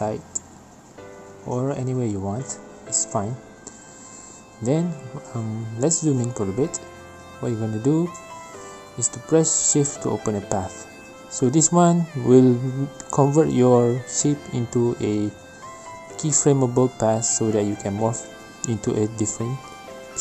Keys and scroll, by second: 3.6 g.